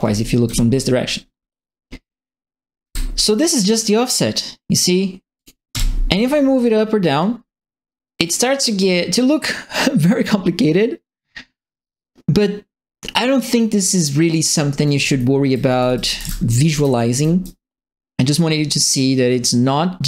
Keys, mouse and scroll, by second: 0.0-0.4 typing, 2.8 e, 5.3 click, 5.7 w, 7.1-14.3 middle drag, 14.7-17.2 typing, 14.8-17.4 right drag, 18.9-20.0 drag.